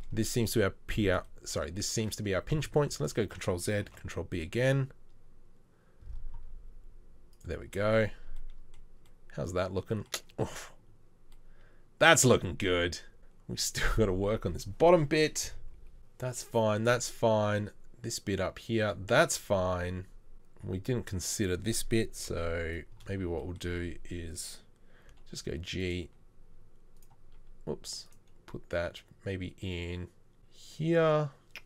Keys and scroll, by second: 2.9 ctrl+z, 4.0 ctrl+b, 8.2 Tab, 22.3 KP_3, 25.1 g, 26.1 g, 27.0 r.